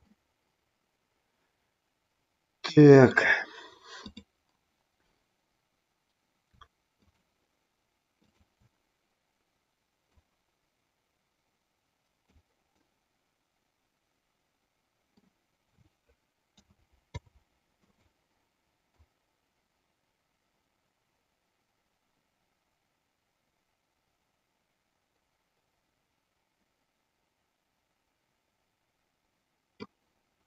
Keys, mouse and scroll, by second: 0.1-3.1 middle drag, 4.0-5.1 drag, 6.9 shift+click, 8.4 shift+click, 10.0-12.2 drag, 12.7-15.2 middle drag, 16.5 a, 17.0 i, 18.9-29.9 drag.